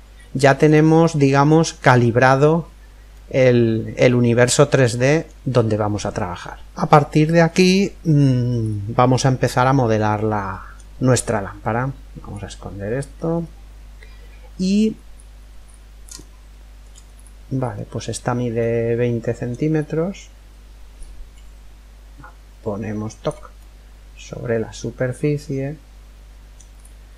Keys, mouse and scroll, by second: 0.2 middle click, 0.2-0.6 scroll down 1, 0.6-3.0 middle drag, 3.0 scroll up 1, 3.2-5.0 middle drag, 8.3-9.3 scroll up 1, 9.3-11.2 middle drag, 11.9 click, 13.1-14.7 middle drag, 14.7-15.2 scroll up 1, 15.0-19.9 middle drag, 19.9-21.1 scroll up 1, 20.5 click, 23.2-25.1 middle drag, 26.4-27.1 scroll up 1, 26.7-27.1 middle drag.